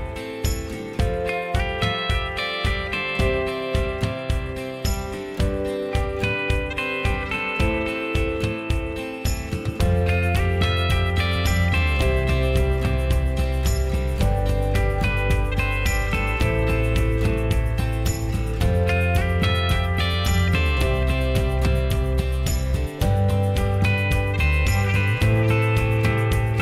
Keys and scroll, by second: 0.1 ctrl+z, 3.3-4.3 typing, 8.1 ctrl+z, 15.3 Delete, 16.0 m, 19.7 m, 23.4 Escape, 23.5 Escape, 25.1 m.